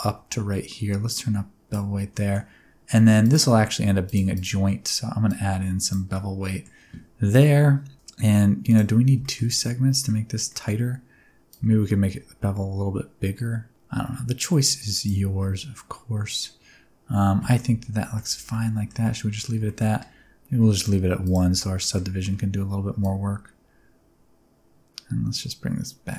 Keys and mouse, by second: 1.1 click, 2.1 middle click, 4.0 shift+click, 5.3 click, 6.1 middle click, 8.6 click, 9.2 shift+middle click, 9.5 middle click, 10.5 middle click, 11.5-15.0 shift+drag, 15.4-16.4 middle drag, 17.5 middle click, 18.2 Tab, 18.5 middle click, 19.0 middle click, 19.6 shift+middle click, 21.2 click, 21.8 shift+middle click, 23.1-26.1 shift+drag.